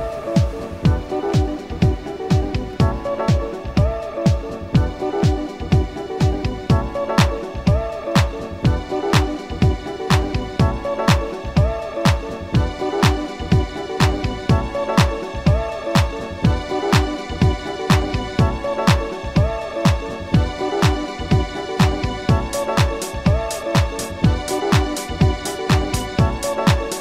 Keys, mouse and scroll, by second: 0.5 shift+click, 1.1 g, 2.7 shift+click, 3.6 r, 4.1 shift+click, 4.5 g, 5.5 shift+click, 5.9 shift+scroll down 1, 6.5 shift+middle click, 7.1 shift+scroll down 1, 8.7 a, 9.1 a, 10.6 shift+click, 11.7 Tab, 13.0 shift+click, 13.9-14.8 shift+scroll up 6, 16.6 click, 17.8 click, 18.7-19.3 drag, 19.5 scroll down 1, 20.1 scroll down 1, 20.9 click, 22.1 scroll up 1, 23.3 click, 23.7 click, 24.8 click, 25.7 click, 26.3 click.